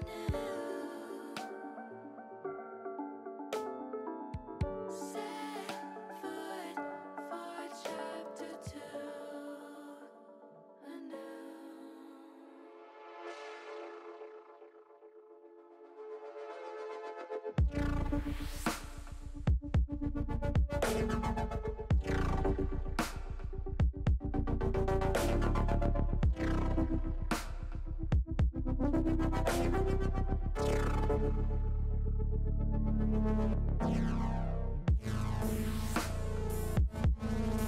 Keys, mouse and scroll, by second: 0.1 ctrl+z, 0.9 middle click, 2.4 click, 3.6 middle click, 4.4-5.6 drag, 6.6 click, 7.6 click, 8.1-9.1 drag, 9.4 middle click, 13.4 shift+click, 14.1 shift+click, 14.6 shift+click, 15.1 middle click, 16.3 middle click, 17.8 s, 18.3 y, 20.7 click, 21.1-22.4 middle drag, 22.6 middle click, 23.6 middle click, 24.5 shift+middle click, 25.1 middle click, 25.7-27.1 middle drag, 28.2-30.4 drag, 31.3-32.4 middle drag, 33.1-34.2 middle drag, 36.4 middle click, 37.5 shift+middle click.